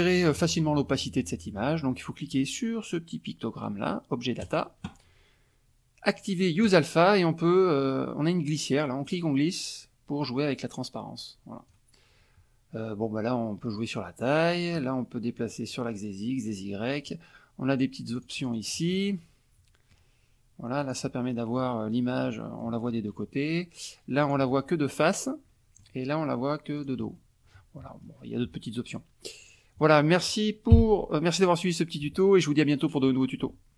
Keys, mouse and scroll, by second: 4.4 click, 6.6 click, 9.0-11.8 drag, 13.7 click, 15.4 click, 16.5 click, 17.7 click, 18.1 click, 18.5 click, 19.1-20.1 middle drag, 20.8 click, 21.3 middle click, 22.2-22.8 middle drag, 24.2 click, 25.0-26.0 middle drag, 26.8 click, 27.1 middle click, 27.3 click.